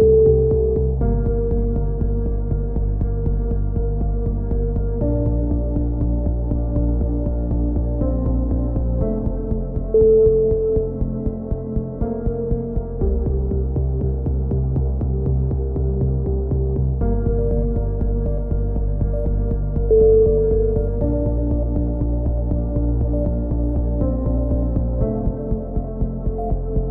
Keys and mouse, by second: 0.4 KP_3, 1.8 n, 2.6 ctrl+s, 3.3 click, 4.9 click, 5.3 click, 6.0 Tab, 6.3 click, 6.8 click, 7.2 KP_7, 7.4 z, 7.7 s, 9.1 right click, 9.7 click, 10.6 right click, 11.0 click, 12.1 s, 13.2 a, 13.5 ctrl+r, 13.9 s, 15.3 right click, 15.7-17.6 typing, 16.5 click, 17.9 right click, 18.0 click, 18.3 ctrl+z, 18.6 c, 18.8 right click, 18.9 click, 20.0 a, 20.1 c, 20.3 right click, 20.5 click, 21.6 a, 21.8 c, 22.0 right click, 22.1 click, 23.3 z, 23.5 z, 23.7 a, 23.9 click, 24.2 right click, 24.5 click, 25.2 KP_7, 25.5 ctrl+r.